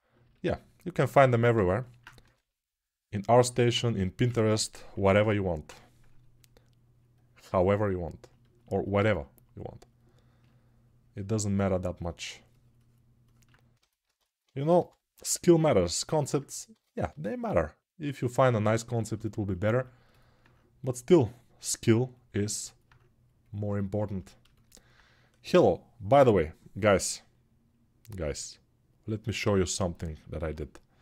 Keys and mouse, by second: 2.0 3, 5.5 [, 14.5 g.